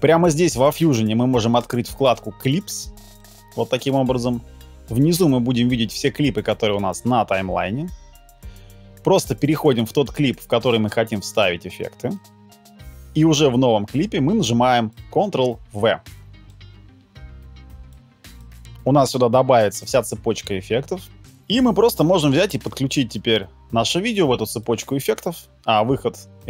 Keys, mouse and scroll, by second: 13.0 ctrl+z, 15.4 ctrl+v, 21.2 ctrl+z.